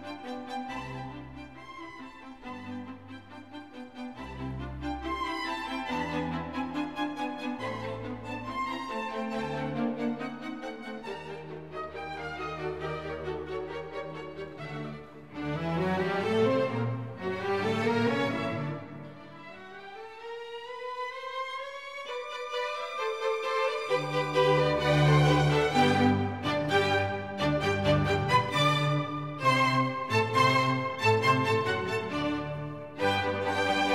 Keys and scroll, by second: 2.0 super+o, 15.6 super+c, 15.7 super+v, 20.1 BackSpace, 32.9 super+o.